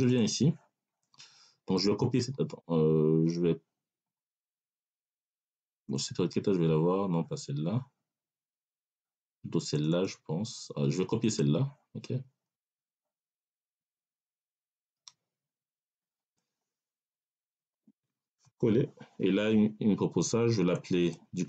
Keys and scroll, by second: 18.3 ctrl+v.